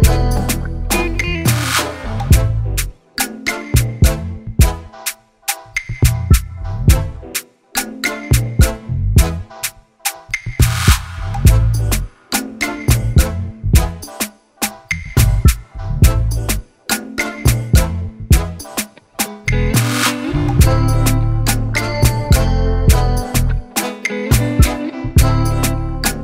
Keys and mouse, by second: 0.0 click, 1.1 Return, 2.9 ctrl+k, 5.5 click, 6.9-8.6 alt+drag, 9.8 click, 10.6 click, 11.6-18.5 typing, 19.7 click, 20.3 click, 21.7 click, 22.5-23.7 typing, 24.2 click.